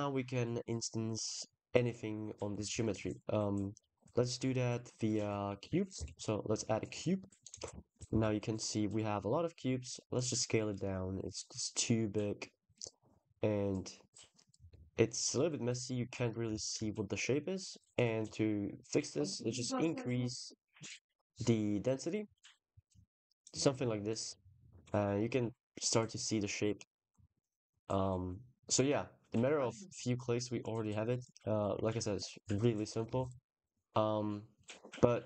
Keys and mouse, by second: 3.6 click, 7.9 ctrl+s, 10.0 shift+click, 16.4 ctrl+s, 19.3-21.8 drag, 26.4-28.7 drag, 30.7 click, 31.7 drag, 32.7 click, 33.0 ctrl+s, 33.4 click.